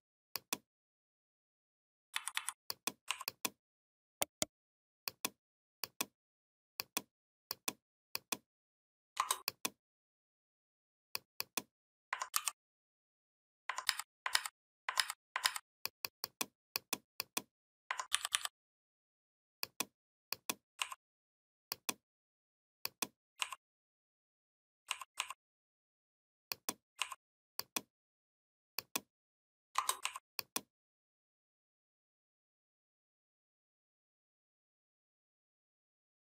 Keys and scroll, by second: 1.9 v, 12.1 ctrl+g, 13.7 ctrl+a, 14.2 ctrl+a, 14.8 ctrl+a, 17.9 ctrl+[.